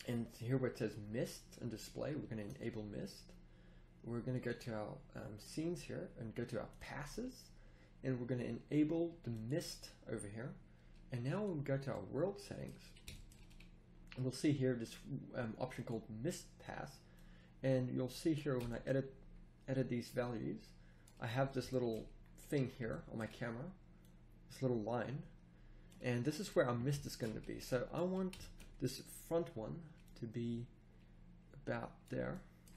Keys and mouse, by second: 12.1 middle click, 19.2-21.1 middle drag, 21.3-25.9 middle drag, 30.0-32.3 middle drag.